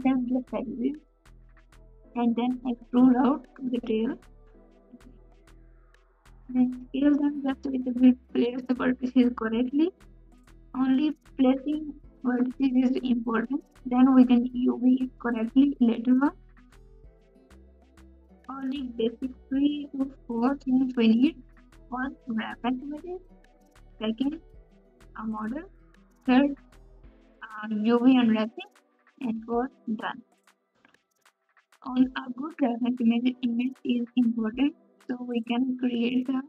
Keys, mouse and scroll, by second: 2.0 s, 2.7 g, 4.2 g, 9.6 s, 10.1 alt+z, 12.2 KP_6, 12.8 ctrl+KP_8, 15.8 KP_Subtract, 15.8 ctrl+KP_4, 16.6 KP_4, 24.0 KP_6, 24.0 KP_3, 25.1 KP_Add, 25.7 g.